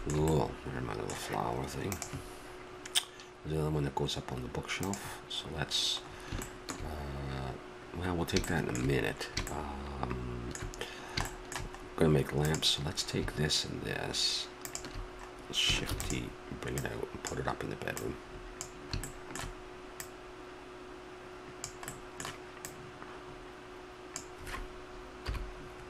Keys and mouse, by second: 6.0-12.5 middle drag, 12.5-14.4 drag, 14.6-16.5 drag, 15.9 shift+d, 16.8-18.5 drag, 19.0 middle click, 20.0-21.6 middle drag, 21.9 middle click, 22.6-24.5 drag, 25.2 KP_7.